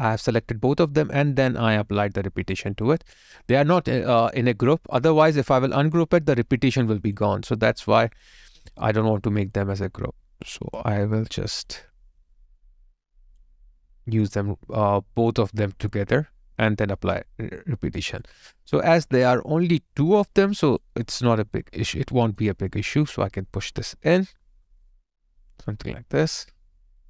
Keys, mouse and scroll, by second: 2.2 alt+click, 18.3 alt+click, 21.6 alt+right click, 22.1 alt+middle click.